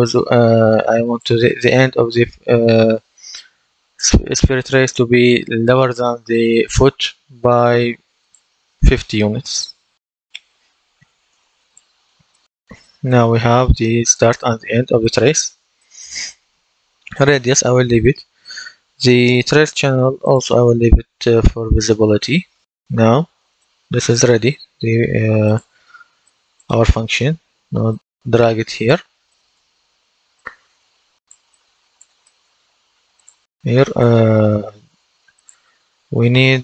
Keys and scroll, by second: 9.6 KP_5, 9.9 KP_0, 11.2 Return.